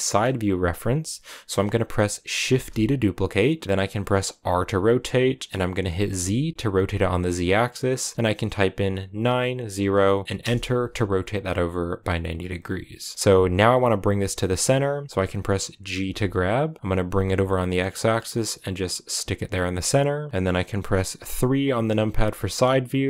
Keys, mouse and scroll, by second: 0.8-2.0 scroll up 1, 2.0 scroll up 1, 2.4 shift+d, 10.7-11.7 scroll down 3, 13.3 scroll up 4, 14.6-15.2 scroll down 2, 15.9 g, 21.8 KP_3.